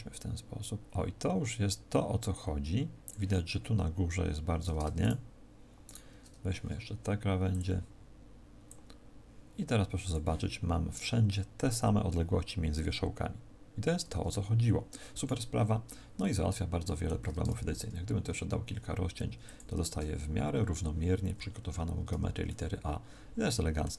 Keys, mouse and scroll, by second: 4.9 shift+right click, 5.8 shift+right click, 7.4 click, 8.6 click, 15.4-16.1 scroll down 1, 16.1 shift+middle click, 16.1-16.6 scroll down 3, 17.6 ctrl+r, 19.4 click, 19.8 a, 22.0 Tab, 22.4 middle click.